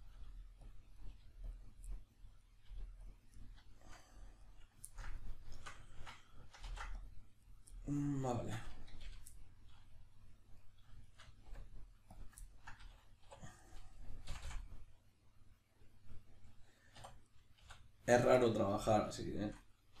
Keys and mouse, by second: 0.0 right click, 0.2 g, 0.7 click, 1.0 right click, 1.1 g, 1.6 click, 1.9 middle click, 2.4 right click, 2.7 g, 3.1 click, 3.4-7.5 middle drag, 6.7 ctrl+r, 7.5 right click, 7.7-8.3 middle drag, 8.3 shift+right drag, 9.0 f, 9.3-10.5 middle drag, 10.5 right click, 11.0 shift+right click, 11.5 w, 12.4-13.6 ctrl+middle drag, 13.2 2, 13.6 right drag, 14.3 f, 14.6-17.3 middle drag, 17.0 3, 17.3 right click, 17.6 x, 18.4-20.0 middle drag.